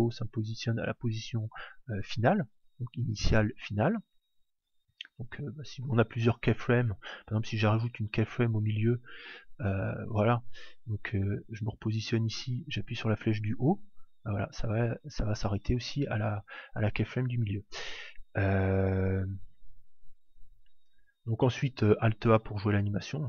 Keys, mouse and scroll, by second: 2.9 Down, 3.5 Up, 7.2 click, 10.5 click, 13.7 Up, 14.1 Up, 14.6 Down, 15.4 Up, 15.7 Up, 16.1 Up, 16.5 Down.